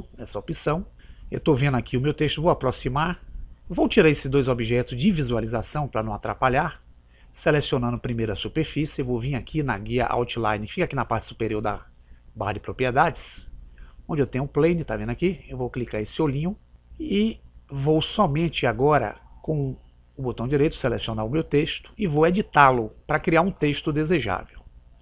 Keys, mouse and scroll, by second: 2.2-5.0 middle drag, 7.5-9.3 right drag, 12.5 click, 16.5 click, 18.9-20.4 middle drag, 20.4-22.0 right drag.